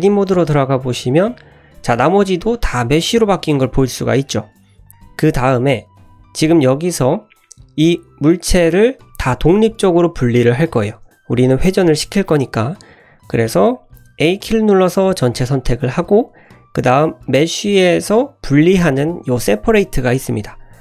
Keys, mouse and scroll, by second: 0.4 Tab, 1.1 scroll up 2, 1.6 scroll down 1, 1.9 shift+middle click, 2.2 click, 2.7 middle click, 4.2 middle click, 4.9 scroll down 1, 5.7 middle click, 6.8-7.9 scroll up 1, 13.3-14.3 scroll down 1, 14.3 a, 17.2-20.8 drag.